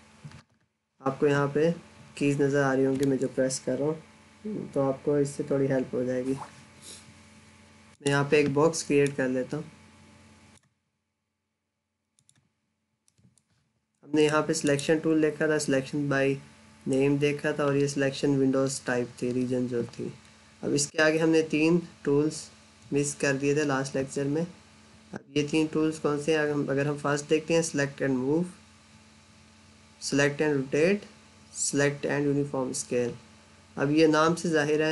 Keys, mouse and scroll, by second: 7.8 click, 12.7 scroll down 1, 12.8 middle click, 14.4 click.